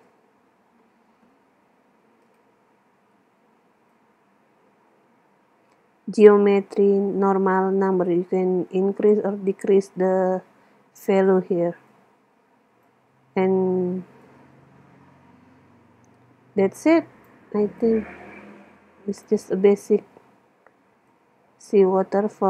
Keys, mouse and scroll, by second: 1.3 KP_0, 2.3-5.7 drag, 11.9-13.7 drag, 14.3-16.1 drag, 17.8-19.6 drag, 21.1-22.4 drag.